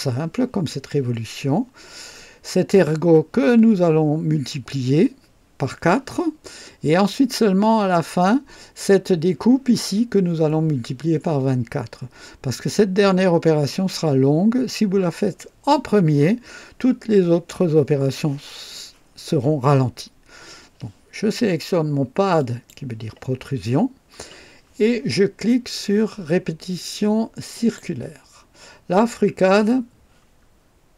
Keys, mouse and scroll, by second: 22.3 click, 27.5 click.